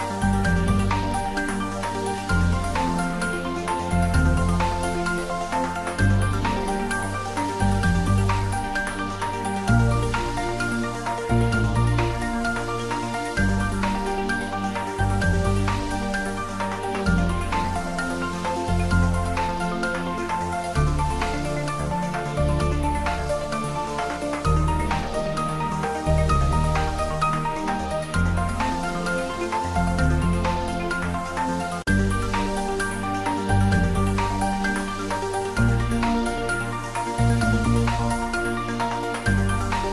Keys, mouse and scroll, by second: 0.6 click, 0.9 scroll down 1, 1.8 g, 3.1 click, 3.7 Tab, 4.2-5.2 scroll up 1, 7.1 scroll down 1, 9.0 click, 12.7 click, 13.8 click, 23.8 click, 26.0-29.6 drag, 29.9 click, 31.2 click, 33.9 click, 36.8-37.2 scroll down 1, 37.4 middle click, 38.4-38.7 scroll up 1.